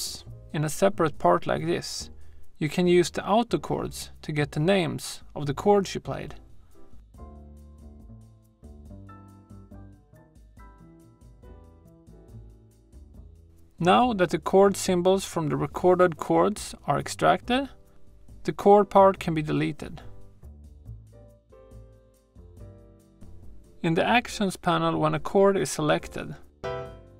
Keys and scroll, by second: 19.9 BackSpace.